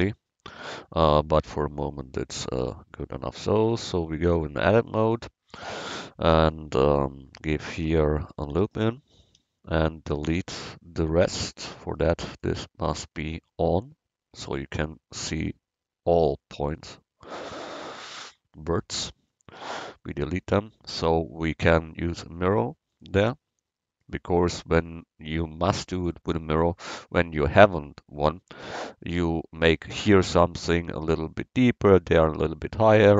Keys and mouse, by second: 2.6 Tab, 6.1 ctrl+r, 10.0 a, 13.8 a, 14.5 a, 16.6 c, 19.6 x, 22.9-24.1 drag, 24.1-26.9 middle drag, 26.9-29.4 drag.